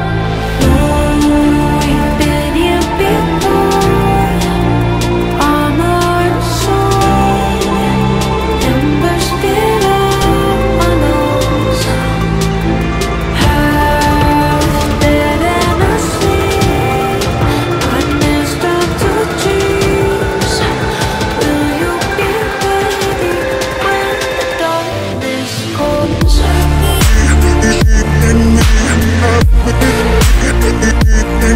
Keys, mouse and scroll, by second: 3.8 Up, 3.9 Up, 4.0-4.9 Up, 5.3 Up, 13.8-17.5 typing, 24.2 typing, 27.1-27.5 super+scroll, 27.9 alt+scroll up 1, 28.1 alt+shift+scroll, 28.3 alt+scroll up 1, 28.7 space, 29.2 alt+scroll up 1, 29.3 alt+scroll down 1.